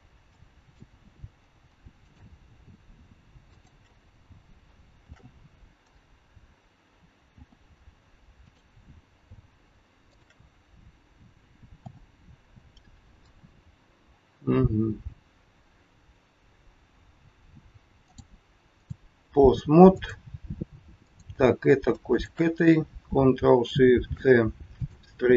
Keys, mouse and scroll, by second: 0.2 shift+middle click, 2.0 click, 3.5 shift+click, 5.0 ctrl+shift+c, 7.2 f, 8.5 click, 10.0 shift+click, 11.7 f, 13.1-13.5 scroll down 2, 18.0 click, 19.8 click, 21.0 click, 22.1 shift+click, 22.4 shift+click, 24.0 ctrl+shift+c.